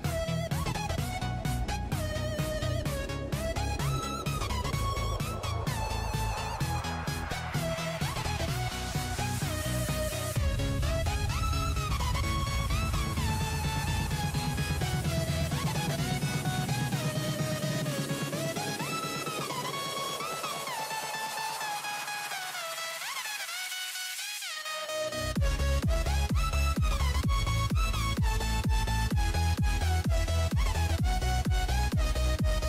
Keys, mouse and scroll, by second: 18.6 click, 22.6 click, 24.5 ctrl+s, 30.7 click, 32.2 click.